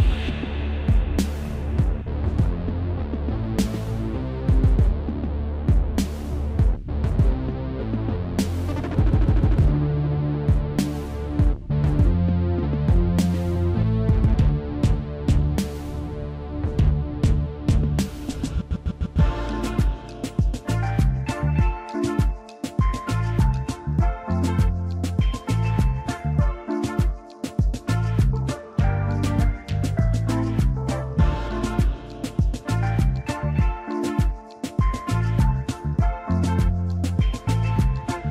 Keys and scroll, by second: 0.8 space, 5.5 a, 7.0 alt+shift+v, 10.7 v, 17.9 |, 19.4 l, 22.4 alt+space, 23.8 space, 29.2-29.6 typing, 30.7 v, 32.1 |, 33.7 ctrl+x, 35.8 ctrl+shift+v, 38.2 space.